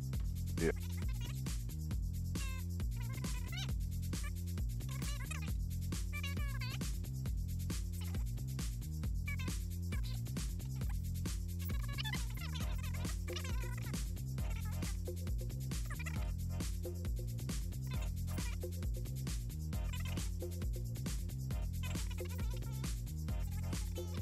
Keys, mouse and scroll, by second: 0.2 click, 0.9 click, 1.3 click, 2.7 click, 3.3 click, 3.5 click, 3.9 8, 4.0 click, 4.9 scroll up 2, 5.3 scroll down 2, 5.7-7.0 typing, 8.3 click, 8.8 Caps_Lock, 8.9 è, 9.4 o, 10.5 click, 10.8 e, 11.1 click, 11.7 ., 14.0 click, 14.6 click, 15.1 click, 16.5-17.3 typing, 18.4-22.0 typing, 22.1 click, 22.7 click, 23.2 click.